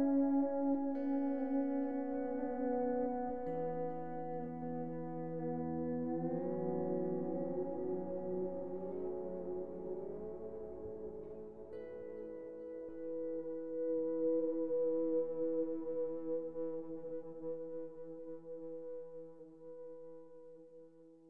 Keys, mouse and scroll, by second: 0.9-6.0 drag, 6.0 middle click, 6.6 scroll up 2, 6.8-9.2 middle drag, 9.2-10.7 scroll down 1, 14.5 click, 15.1 KP_7, 16.1 Tab, 16.4 shift+middle click, 17.1-17.7 scroll up 2, 17.7 3, 17.8 click, 18.3 KP_3, 19.0 g, 20.7 scroll down 2, 20.9 middle click.